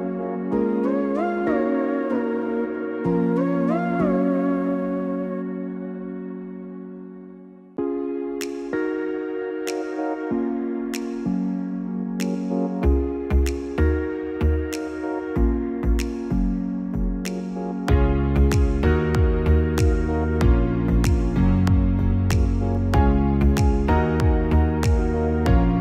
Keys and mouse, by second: 1.6-7.1 drag, 3.3 BackSpace, 8.9 click, 11.3-15.7 drag, 12.8 BackSpace, 13.2 BackSpace.